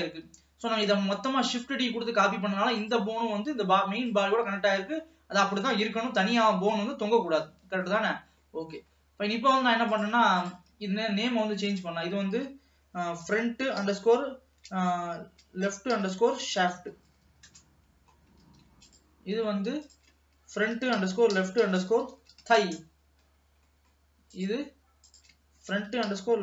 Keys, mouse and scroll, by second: 2.8 click, 4.1 click, 4.7-5.1 scroll down 1, 5.1 middle click, 6.0-6.5 scroll up 2, 6.5 ctrl+s, 6.7-7.1 scroll down 1, 7.1-8.4 middle drag, 8.4 scroll up 1, 8.6 middle click, 9.2-9.9 scroll up 2, 9.9 click, 10.5 click, 11.7-14.9 drag, 18.7 ctrl+s, 19.0 click, 19.9-23.0 drag, 23.5-23.8 scroll down 2, 23.8 middle click, 24.5 click, 25.2-26.4 drag.